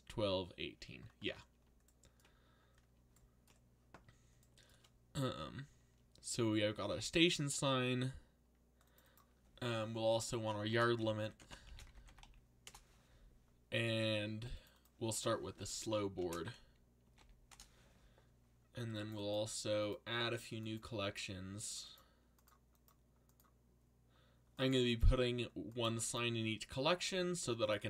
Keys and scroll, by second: 10.4-12.7 typing, 15.9-17.7 typing.